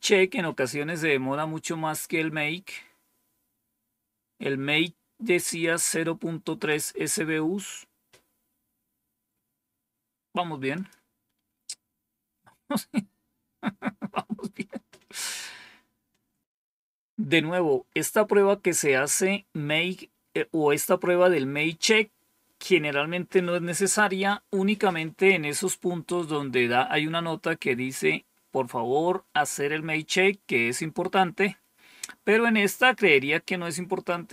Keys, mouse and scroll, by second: 5.5-6.6 drag, 10.6 click, 11.2 scroll down 1, 34.1-34.3 drag.